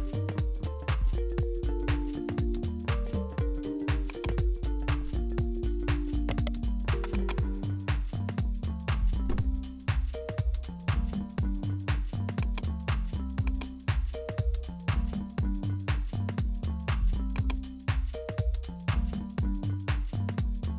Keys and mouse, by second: 6.3 right click, 7.2-9.6 drag, 11.3-15.5 drag, 15.5 Tab, 17.4 click, 19.3-20.7 drag.